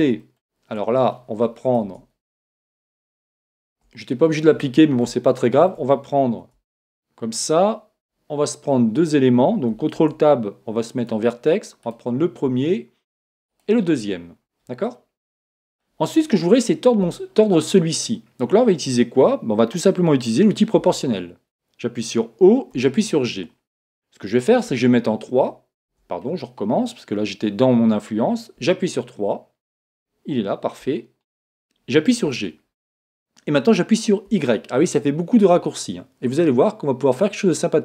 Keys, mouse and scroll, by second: 1.2 Tab, 1.9 Tab, 3.3 scroll down 1, 3.3-7.1 middle drag, 6.8 Tab, 10.0 ctrl+Tab, 11.9-15.2 right drag, 14.9-16.7 middle drag, 20.9 o, 22.8 g, 28.6 KP_3, 29.4-32.7 middle drag, 32.3 g.